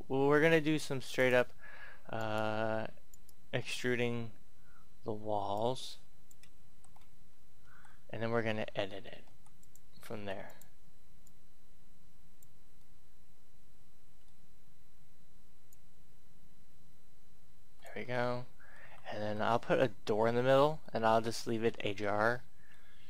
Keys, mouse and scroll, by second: 1.0 click, 2.0 right click, 3.0 shift+right click, 5.5 click, 6.6 ctrl+z, 7.5 e, 9.5-12.7 drag, 12.7 middle click, 13.8-15.6 scroll up 1, 15.6-18.1 drag, 18.1-19.7 middle drag, 19.7 Tab, 20.8 shift+middle click, 21.5 scroll up 1, 22.0 middle click.